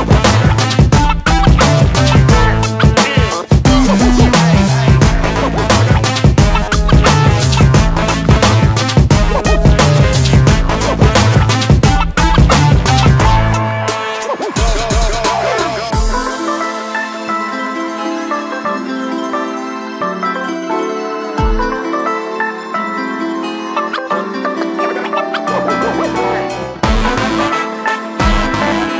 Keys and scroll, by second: 8.5 p, 12.1 space, 13.1 Delete, 17.0 typing, 18.5 p, 23.8 space, 25.7 ctrl+g.